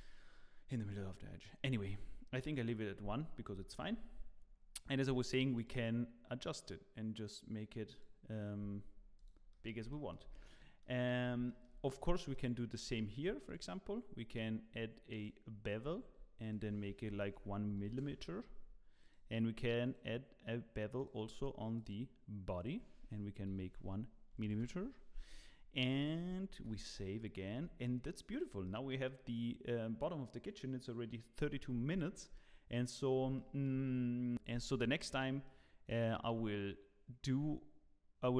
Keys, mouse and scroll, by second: 1.0-1.4 scroll down 1, 2.4 click, 2.5 click, 3.4-3.9 scroll up 8, 5.3 shift+click, 5.8 shift+click, 8.7-9.2 scroll down 5, 9.2 click, 9.5 middle click, 9.9 shift+middle click, 10.2 scroll down 2, 10.4 middle click, 11.1 scroll up 1, 11.4 shift+middle click, 12.1 middle click, 12.7 scroll up 2, 12.9 shift+middle click, 13.4 click, 14.3 click, 17.8 click, 17.8 m, 19.0 click, 19.8 click, 21.8 click, 24.4 click, 24.4 m, 25.6 scroll down 2, 25.8 middle click, 26.6 ctrl+s, 26.9 scroll down 2, 27.1 middle click, 27.6 scroll down 2, 27.8 middle click, 28.3 click, 28.6 middle click, 31.6 scroll up 3, 31.9 shift+middle click, 33.3 shift+middle click, 34.3 middle click, 34.5 middle click, 35.4 middle click, 35.7 middle click.